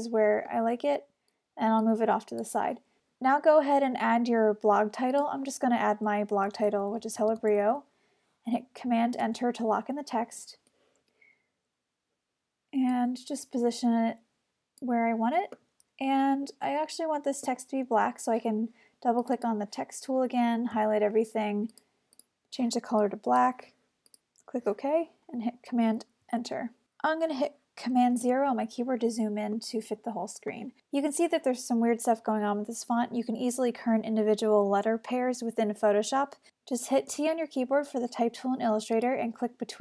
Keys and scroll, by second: 9.2 super+Return, 9.7 super+v, 10.5 v, 21.8 super+a, 26.4 super+Return, 28.3 super+0, 37.1 t.